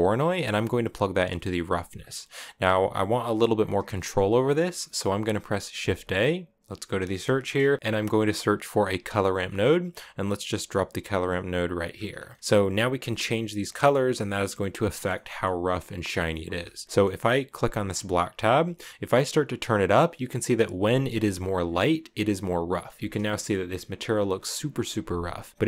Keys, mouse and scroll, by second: 0.0-3.0 drag, 3.7 middle click, 4.5 scroll up 1, 4.6 middle click, 5.5 shift+a, 10.8 click, 11.6 scroll up 2, 11.8 scroll down 1, 11.9 scroll up 2, 12.0-14.0 middle drag, 14.0-14.6 scroll up 1, 14.6 scroll down 1, 14.9-15.9 middle drag, 15.9 scroll up 1, 16.0 middle click, 16.7 scroll down 1, 16.8 scroll up 1, 16.8 middle click, 17.6 click, 22.7 scroll up 2, 23.1-25.4 shift+middle drag, 25.4 click.